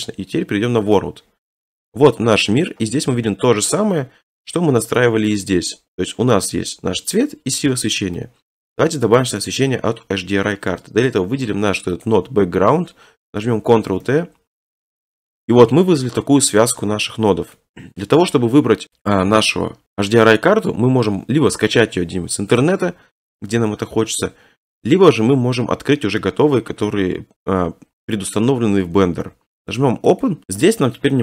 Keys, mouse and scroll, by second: 1.0 click, 1.7-3.0 scroll, 3.7 scroll, 5.4 click, 7.7-8.2 scroll, 8.5-9.2 scroll, 9.2 click, 12.0 click, 13.9 ctrl+t, 15.3 middle click, 15.7-16.2 scroll, 16.2 click, 17.2 scroll, 17.6 middle click, 18.1 middle click, 18.2 middle click, 19.5 middle click, 19.6 middle click, 19.7 middle click, 20.0 scroll, 20.7-21.1 scroll, 30.2 click.